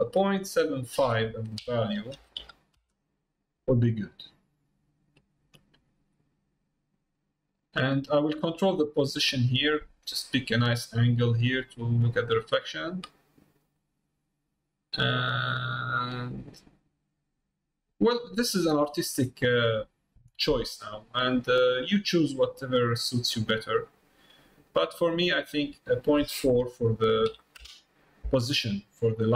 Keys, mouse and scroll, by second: 5.2 middle click, 6.3 middle click, 8.0 middle click, 8.8-12.3 middle drag, 13.8-19.0 drag, 19.7-25.1 drag, 25.9-28.6 drag.